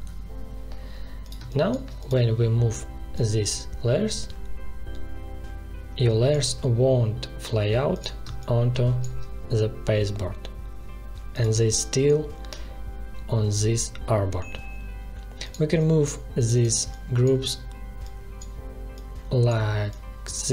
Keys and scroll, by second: 1.3 space, 8.2 space.